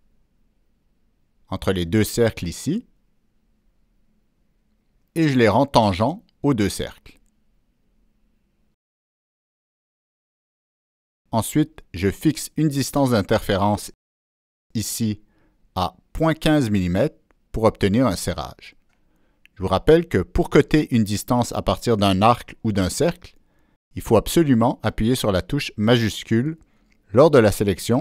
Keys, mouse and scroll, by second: 2.0 click, 3.4 click, 4.3 click, 5.2 click, 6.0 click, 6.6 Escape, 7.4 click, 8.3 ctrl+click, 9.4 click, 10.2 click, 11.0 click, 11.8 ctrl+click, 13.3 click, 14.2 right drag, 15.6 click, 16.7 shift+click, 16.9 right click, 17.9 shift+click, 17.9 right click, 18.7 shift+click, 20.1 Return, 20.2 shift+click, 21.5 Escape, 24.1-24.9 drag, 24.5 Escape, 24.9 Escape, 25.7 Escape, 25.7 click, 26.6 ctrl+middle click, 27.0 ctrl+middle click, 27.1 ctrl+scroll up 1, 27.4-28.0 ctrl+middle drag.